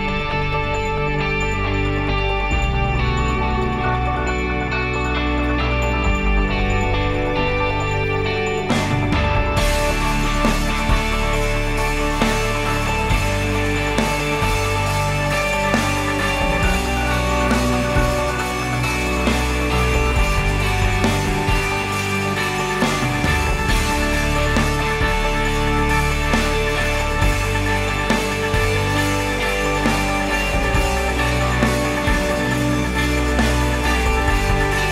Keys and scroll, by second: 7.1 ctrl+s.